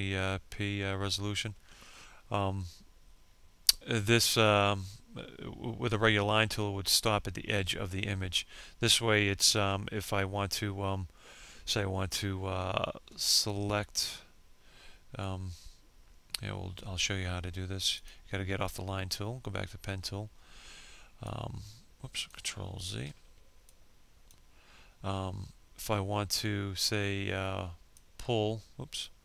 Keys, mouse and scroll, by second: 17.0 click, 20.3 ctrl+click, 21.9 ctrl+z, 22.7 ctrl+click, 26.9 ctrl+click, 28.5 ctrl+click.